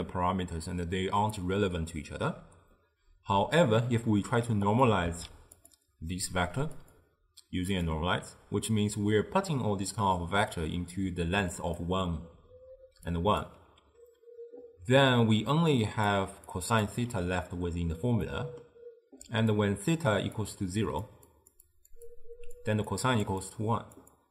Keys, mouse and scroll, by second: 4.7 click, 5.1 shift+d, 6.8-9.9 drag, 11.0-17.0 typing, 11.6 click, 13.2 click, 15.8 click, 16.6 drag, 18.3-19.3 middle drag, 19.3-24.3 typing, 19.6 click, 20.5 click, 21.4 click, 21.8 click, 22.2 click, 23.0 click, 23.5 click, 24.2 click.